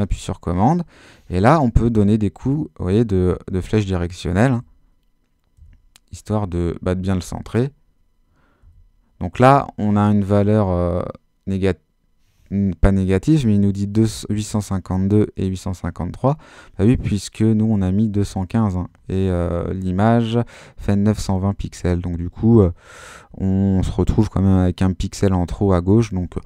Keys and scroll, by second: 2.1 super+Left, 7.4 super+Left, 8.6 super+Right, 9.4 super+Left, 10.3 super+Right.